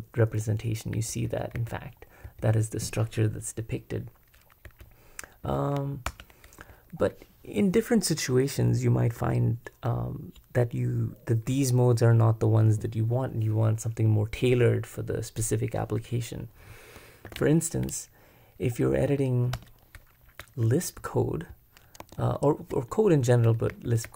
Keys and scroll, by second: 0.7-2.2 typing, 4.6 j, 5.4 k, 6.1 super+Return, 17.3 super+b, 18.9 p, 19.6 Return, 20.4-22.5 typing, 22.0 Escape, 23.7 j, 24.0 j.